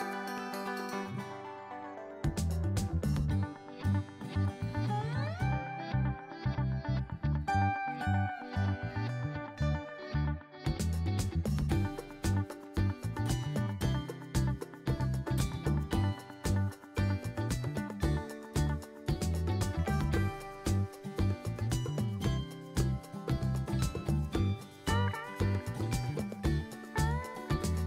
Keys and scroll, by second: 8.0-8.9 typing, 10.9-11.8 typing, 25.0-25.9 typing.